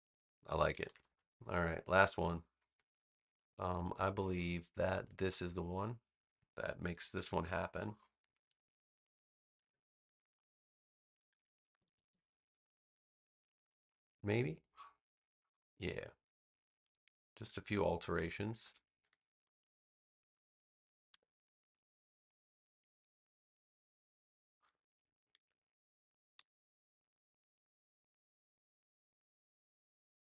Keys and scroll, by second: 0.8 super+=, 1.6 space, 7.0 super+c, 7.5 space, 9.5 super+v, 11.7 super+=, 12.6 space, 18.1 BackSpace, 21.0 BackSpace, 25.3 super+z, 26.2 BackSpace.